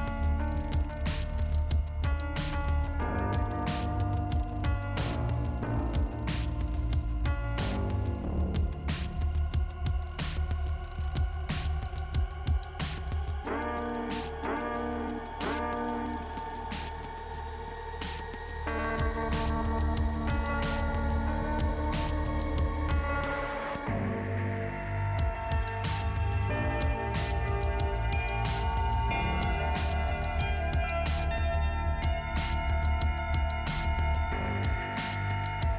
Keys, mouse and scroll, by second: 0.1 click, 2.0 click, 2.1 click, 3.3 click, 6.1 click, 6.9 click, 8.6 click, 9.8 click, 12.2 click, 13.5 click, 13.9 scroll down 2, 14.7 click, 16.3 scroll down 2, 17.9 click, 20.3 k, 22.2 click, 25.4 click, 25.4 click, 26.1 click, 28.1 click, 28.9 click, 29.9 click, 31.1 scroll up 2, 32.1 click, 32.9 click, 33.9 click.